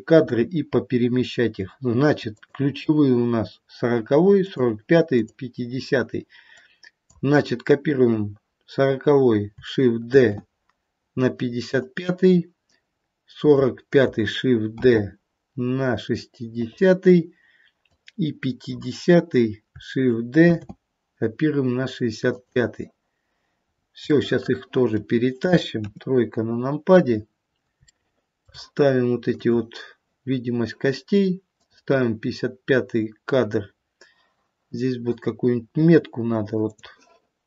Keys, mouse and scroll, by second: 0.4-1.5 scroll up 5, 2.4 click, 6.4 click, 10.0 shift+d, 12.6 click, 14.8 shift+d, 17.8 click, 20.5 shift+d, 23.6-24.0 scroll down 3, 24.0 middle click, 24.7 middle click, 25.7 KP_3, 27.0-27.6 scroll up 1, 27.6 scroll up 2, 27.8 shift+middle click, 29.3 click, 31.6 click, 36.7 click.